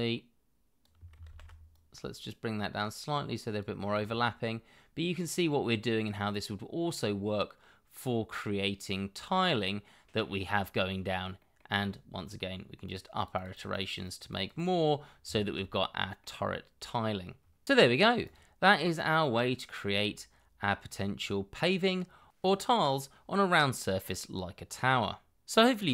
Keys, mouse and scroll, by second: 1.2 ctrl+z, 3.9 scroll down 1, 6.1 middle click, 13.1 double click, 14.9-15.2 scroll down 1, 15.3 shift+middle click, 15.7 middle click, 16.6-17.4 scroll up 1.